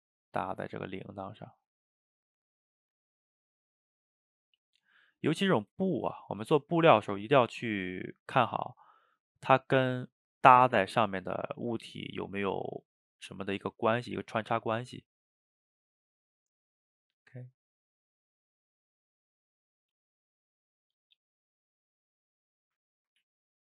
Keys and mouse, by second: 0.1-1.1 middle drag, 1.1-3.7 drag, 3.7 middle click, 4.4 click, 4.9-6.5 middle drag, 6.5 click, 6.9-8.6 middle drag, 8.6 click, 9.5-10.6 middle drag, 10.6-12.7 drag, 12.7 middle click, 13.6 click, 14.0 middle click, 14.9 click, 15.8 middle click, 16.7-20.9 drag, 20.9 middle click, 21.8 click, 22.8 middle click, 23.3 ctrl+z.